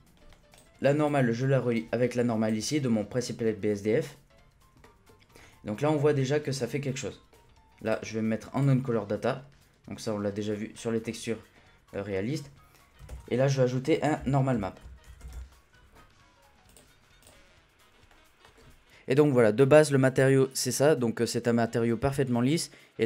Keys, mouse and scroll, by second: 0.8 click, 1.7-4.0 drag, 4.0-5.8 middle drag, 5.8-6.2 scroll up 1, 6.2 middle click, 6.4-6.8 scroll up 3, 6.8 scroll down 1, 7.0 middle click, 7.8-10.5 drag, 10.5-11.0 scroll down 2, 11.0-13.0 middle drag, 13.0 shift+a, 18.1 scroll down 1, 18.4-19.5 scroll up 2, 19.5 scroll up 1, 19.8-22.8 drag.